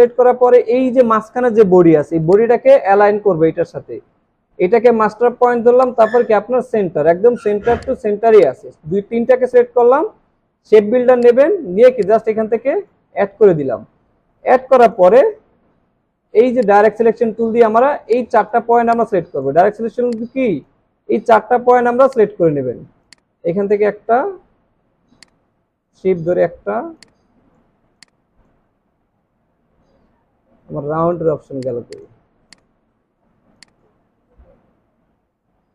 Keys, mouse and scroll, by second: 18.1 shift+click, 27.0 shift+click, 28.9 alt+scroll up 3, 30.7 alt+scroll down 1, 33.5 space, 34.1-34.5 alt+scroll up 4.